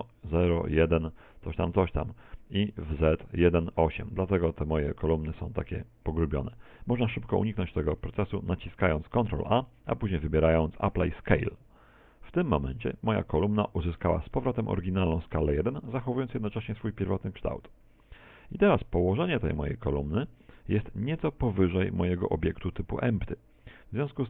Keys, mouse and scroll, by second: 8.1 ctrl+a, 16.3 Tab, 18.2 Tab, 19.0 middle click, 19.7 middle click, 22.3 right click, 24.1 middle click.